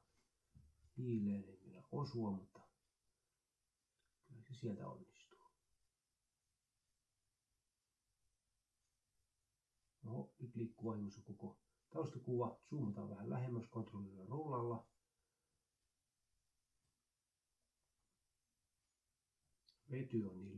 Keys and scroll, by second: 1.5 Left, 1.9 Right, 2.4-4.2 typing, 4.7 Delete, 5.7 ctrl+Left, 6.1 Delete, 10.2 ctrl+z, 18.4-20.1 typing, 20.1 Delete.